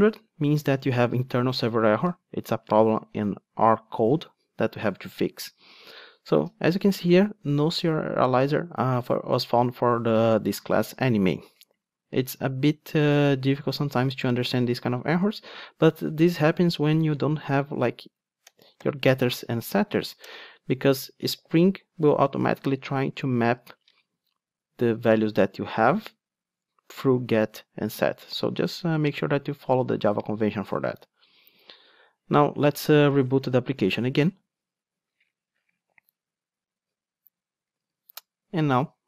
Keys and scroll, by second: 18.8 super+n, 33.9 super+r.